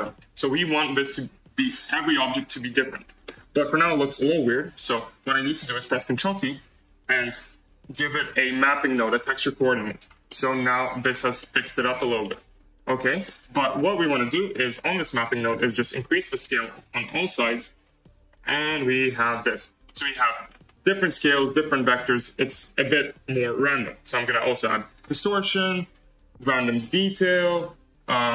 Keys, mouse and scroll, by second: 1.4-2.0 scroll down 3, 2.0 shift+middle click, 2.5-3.2 scroll up 5, 3.2-5.1 shift+middle drag, 5.1-6.1 drag, 6.1 ctrl+t, 10.3-16.3 middle drag, 16.3 click, 17.3-19.1 drag, 19.1-19.4 scroll down 1, 19.4-20.6 middle drag, 20.6 scroll up 3, 20.8-24.0 middle drag, 24.0-25.1 drag, 25.8-28.3 drag.